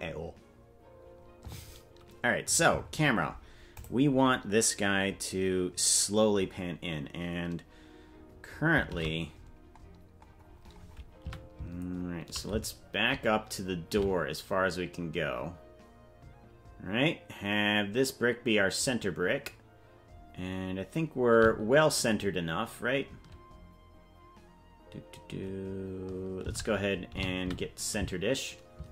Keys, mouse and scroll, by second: 4.6 click, 9.7 shift+`.